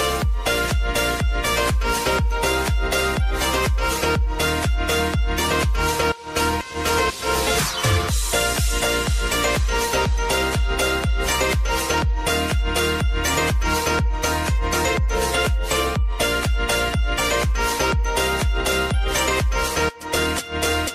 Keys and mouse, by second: 0.5 click, 0.8 space, 6.4 space, 8.6 n, 9.0 space, 13.5 space.